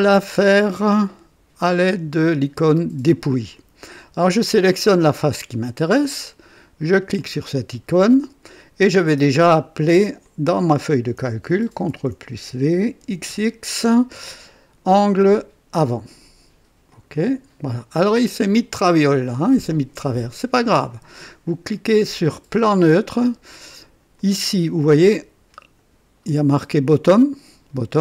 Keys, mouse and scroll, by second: 4.8 click, 7.1 click, 10.2 click, 11.8 ctrl+v, 13.0 typing, 14.3 typing, 16.2 click, 16.9 click, 18.1-19.8 drag, 20.0-21.1 drag, 22.6 click, 24.1-26.0 drag, 26.8-28.0 drag.